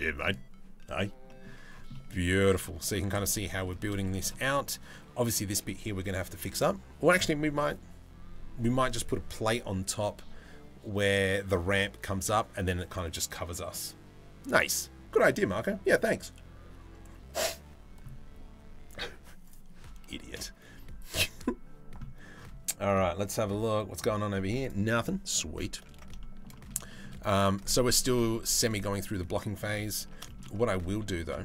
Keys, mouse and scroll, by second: 0.9 middle click, 1.6-2.2 middle drag, 2.5 shift+middle click, 3.0 middle drag, 3.6 shift+middle drag, 25.8 shift+middle drag, 26.2 middle click, 26.5 shift+middle drag, 28.4-28.8 middle drag, 29.2 middle click, 29.6 Tab, 29.9 shift+middle click, 30.6 3, 30.8 middle click, 31.3 shift+middle click.